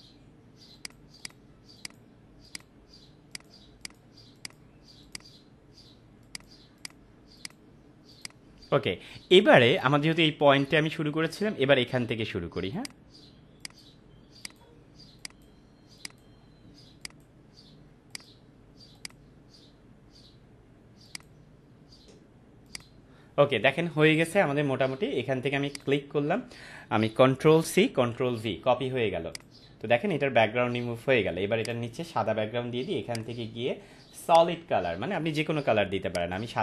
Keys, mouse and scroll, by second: 0.7 click, 12.7 click, 24.4 ctrl+-, 25.6 ctrl+click, 27.5 ctrl+c, 29.3 click, 30.6 ctrl+-, 31.6 click.